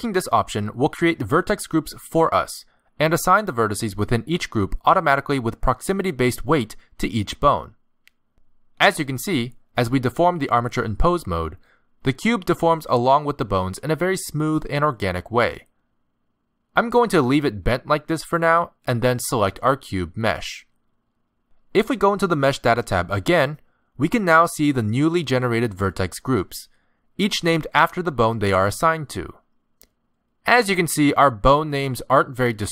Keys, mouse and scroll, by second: 6.8 click, 8.0 click, 9.5 click, 10.1 r, 11.4 click, 12.0 r, 12.9 z, 13.6 middle click, 14.2 r, 15.7 click, 16.1 r, 16.7 middle click, 19.3 click, 20.5 click, 22.7 click, 24.8 click, 25.3 click, 25.8 click, 28.0 click, 28.4 click, 28.9 click, 29.4 click.